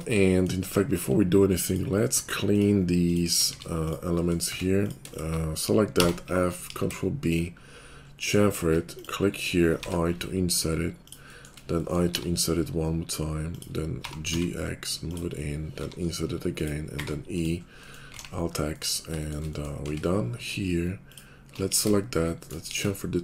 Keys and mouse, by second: 0.0-1.1 middle drag, 0.6 Tab, 1.1-2.1 alt+drag, 3.3-5.0 middle drag, 3.5 x, 4.4 Tab, 5.0 shift+click, 5.3 middle click, 6.0 f, 6.6 ctrl+b, 6.6 ctrl+click, 7.0-8.7 shift+drag, 9.7 i, 10.9 shift+click, 12.2 i, 13.9 g, 15.8 i, 16.9 e, 18.1 alt+x, 19.8 Tab, 20.4-21.4 alt+drag, 21.6 ctrl+b, 21.6 ctrl+shift+click, 22.6 ctrl+b, 22.6-23.2 ctrl+shift+drag.